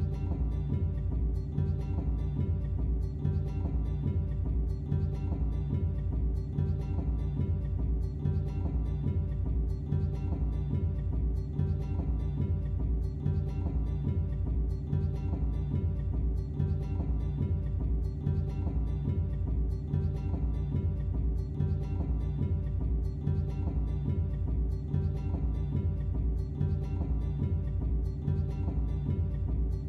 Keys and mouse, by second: 1.3 Delete, 1.4 click, 2.7 click, 3.0 click, 3.1 ctrl+c, 3.3 ctrl+shift+v, 3.7 a, 3.8 click, 4.5 click, 4.7 a, 5.1 click, 5.6 Delete, 5.7 a, 5.9 click, 6.1 ctrl+c, 6.3 ctrl+shift+v, 6.4 click, 7.0 ctrl+v, 7.1 click, 7.7 click, 8.0 click, 9.3 click, 9.9 a, 10.0-10.6 drag, 10.6 ctrl+v, 10.7 click, 13.3 click, 13.6 click, 13.9 click, 14.3 click, 15.0 click, 15.7 click, 16.1 click, 16.6 click, 17.5 click, 17.9 click, 18.5 click, 19.2 click, 20.2 click, 20.4 ctrl+c, 20.4 click, 20.6 ctrl+shift+v, 20.7 click, 25.5 click, 27.2 click.